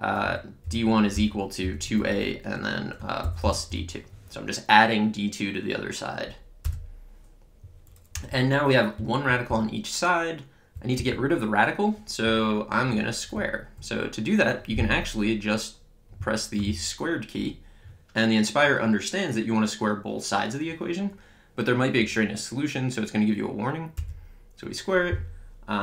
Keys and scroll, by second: 0.7-2.4 typing, 3.4 d, 3.7 2, 6.7 Return, 8.2 Up, 9.0 Right, 9.5 Left, 11.0 Down, 24.0 Return.